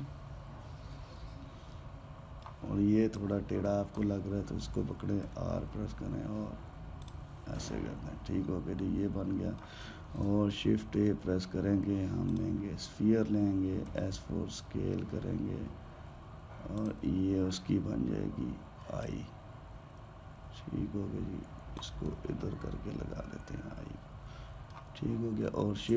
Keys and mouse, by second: 3.9 click, 6.0 r, 8.3-10.9 middle drag, 10.9 shift+a, 14.6 s, 19.7 click, 22.8-25.8 middle drag.